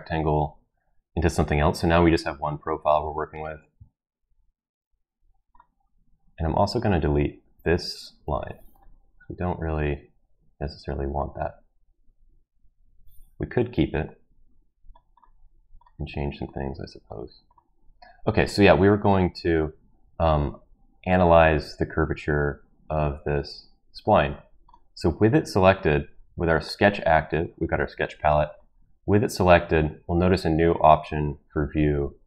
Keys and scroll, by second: 8.1 Delete, 13.6 ctrl+z.